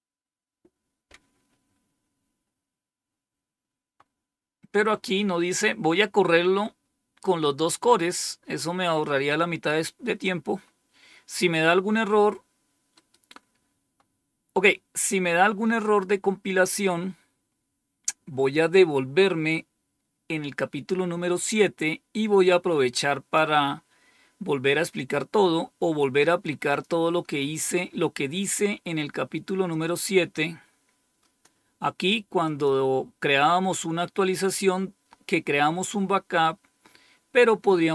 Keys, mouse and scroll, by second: 3.4-4.2 scroll down 2, 4.2-5.5 scroll down 1, 5.5-6.3 scroll up 2, 9.2-10.2 drag, 26.6 click, 29.6-31.4 drag, 32.3 click, 34.0-37.9 scroll down 4.